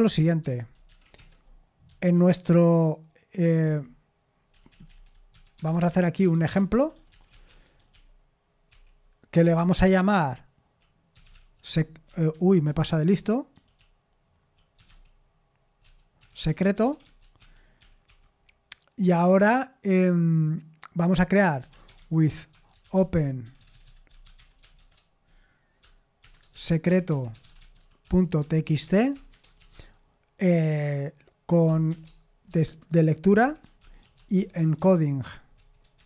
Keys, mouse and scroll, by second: 0.0-19.2 typing, 17.4 Escape, 21.3-25.3 typing, 26.5-29.7 typing, 32.2-36.0 typing.